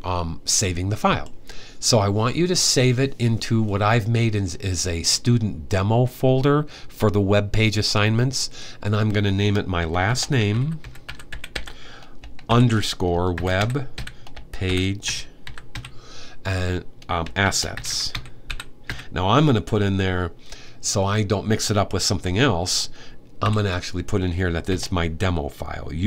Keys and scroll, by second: 9.7-16.0 typing, 17.0-19.2 typing, 23.2 typing, 24.5 typing, 25.6-26.0 typing.